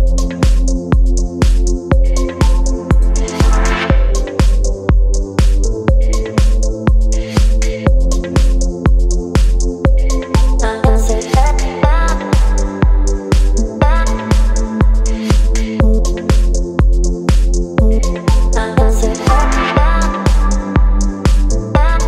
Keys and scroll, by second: 6.4 space, 8.5 Right, 8.6 Right, 8.8 Right, 9.1 Down, 9.3 Down, 9.4 Down, 12.9 Up, 18.0 Up, 18.1 Up, 18.3 Up, 18.4 Up, 18.6 Up, 18.7 Up, 18.9 Up, 19.0 Up, 19.1 Up, 21.1 Up, 21.3 Up.